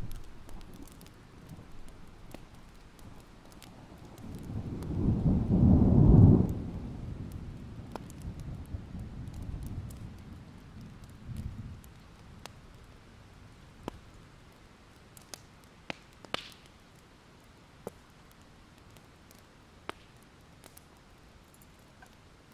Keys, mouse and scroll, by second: 0.4-1.6 scroll up 2, 1.6 click, 6.6 shift+click, 6.8 right click, 7.7 click, 8.1 alt+scroll down 1, 8.5 alt+scroll up 1, 8.9 alt+click, 9.8 click, 9.9 right click, 10.8 click, 11.1 alt+scroll up 1, 11.4 click, 12.1 scroll down 1, 12.6-13.2 alt+scroll up 1, 13.2 click, 14.2 alt+scroll up 1, 14.7 click, 15.5-15.9 alt+scroll down 1, 16.0 alt+scroll up 1, 19.2 click, 20.1-20.9 ctrl+scroll down 1, 21.0-21.6 alt+scroll up 1, 21.6 click, 21.7-22.5 scroll down 3.